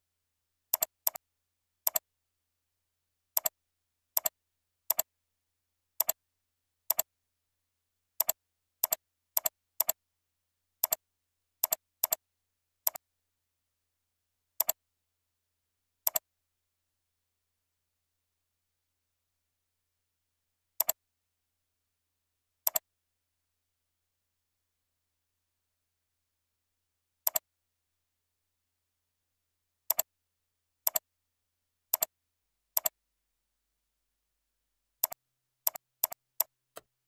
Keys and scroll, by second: 15.2 ctrl+z, 35.9 ctrl+c, 36.2 ctrl+v, 36.7 ctrl+a.